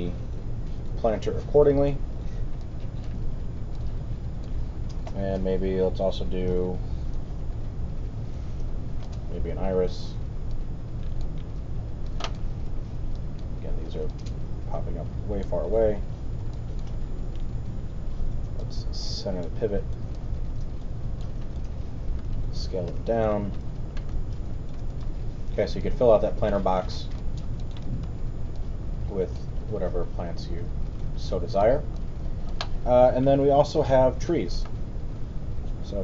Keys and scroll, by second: 12.7 alt+w, 22.9 r, 25.0 w.